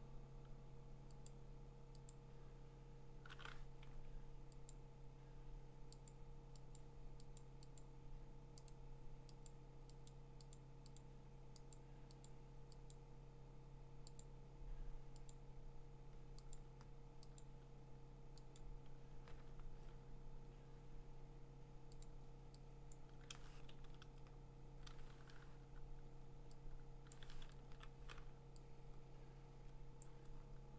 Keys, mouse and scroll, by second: 2.3 click, 3.8 Escape, 4.7 click, 6.1 click, 6.7 click, 7.4 click, 7.8 click, 8.7 click, 9.4 click, 10.1 click, 10.5 click, 11.0 click, 11.7 click, 12.2 click, 12.9 click, 14.2 click, 15.3 click, 16.5 click, 17.4 click, 18.5 click, 22.0 click, 22.9 click, 23.7 ctrl+z, 25.6 j, 27.1 click, 27.6 ctrl+z, 30.0 click.